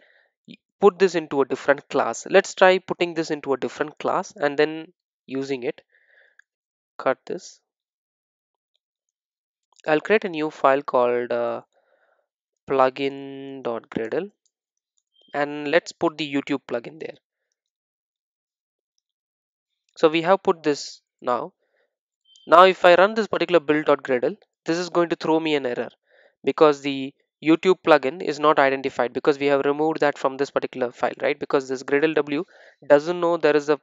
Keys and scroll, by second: 7.2 super+x, 9.6 super+n, 18.5 super+v, 20.9 super+e.